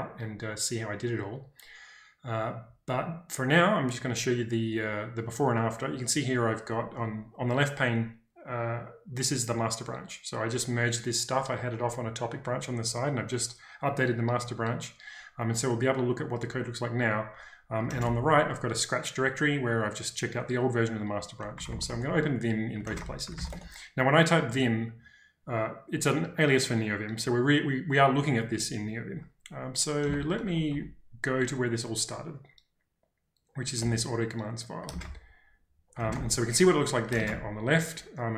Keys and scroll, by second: 17.9 ctrl+space, 18.0 l, 20.8-23.8 typing, 29.8-31.2 typing, 33.9 typing, 35.0 ctrl+space, 35.0 l, 36.1 ctrl+space, 36.1 h, 37.2 ctrl+space, 37.3 l.